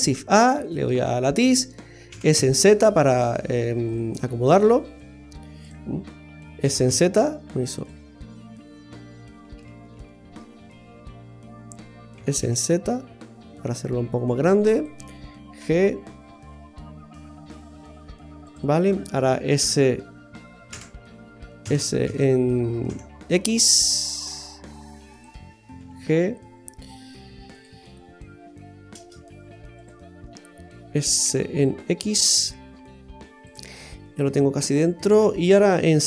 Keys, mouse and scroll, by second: 2.1 s, 4.5-5.2 scroll down 2, 4.9 z, 5.6 click, 6.6 s, 8.1-9.4 scroll down 9, 9.7 ctrl+z, 9.9 ctrl+z, 10.6-12.1 scroll up 10, 12.1 s, 15.6 g, 19.6 d, 20.7 Escape, 21.6 s, 25.8 g, 29.0 shift+s, 31.3 s, 33.8 scroll down 1, 34.1 middle click.